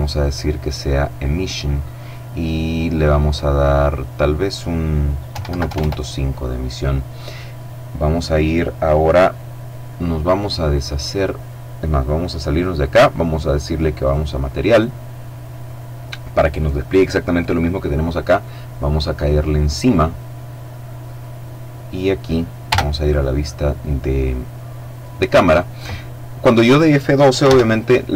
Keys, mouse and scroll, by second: 0.2 click, 2.8 click, 4.3 KP_1, 4.4 KP_Decimal, 4.6 KP_5, 4.8 KP_Enter, 11.2 click, 13.0 click, 18.1 click, 19.8-20.3 scroll down 1, 20.3 middle click, 20.9 middle click, 21.7 KP_0, 26.4 ctrl+s, 26.7 ctrl+click.